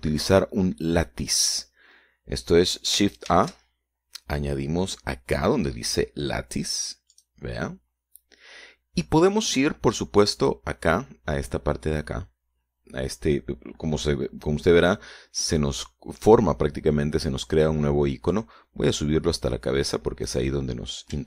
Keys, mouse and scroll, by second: 4.5 shift+a, 8.3 click, 11.5 click, 19.5-21.2 drag.